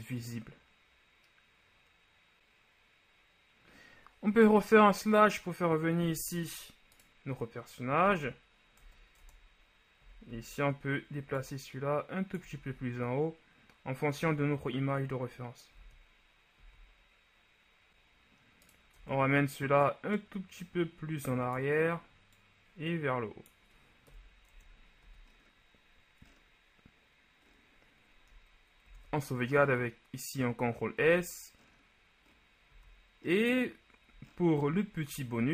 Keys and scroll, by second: 4.8 KP_Divide, 8.9 Tab, 9.3 Tab, 10.1 a, 10.4 a, 12.7 shift+z, 15.9 shift+z, 16.7 z, 24.2 KP_1, 24.6 Tab, 25.2 a, 29.0 ctrl+s, 31.1 z.